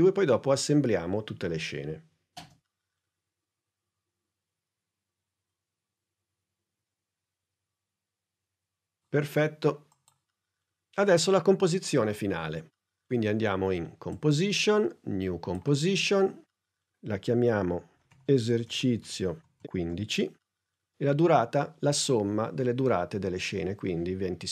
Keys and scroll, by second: 17.9 e, 19.0-20.2 typing, 24.1 2, 24.4 0.